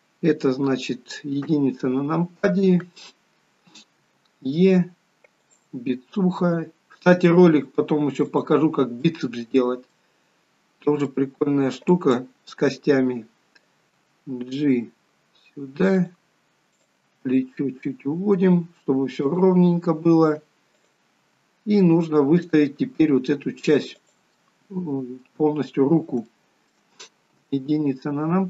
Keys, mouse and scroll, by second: 1.6 KP_1, 4.2 e, 9.3 middle click, 10.4 scroll down 2, 11.3 middle click, 12.1 click, 14.1 g, 16.9 click, 17.2 g, 20.0-20.3 scroll down 1, 21.0 click, 21.6 g, 24.6 middle click, 26.5 shift+middle click, 27.6 KP_1.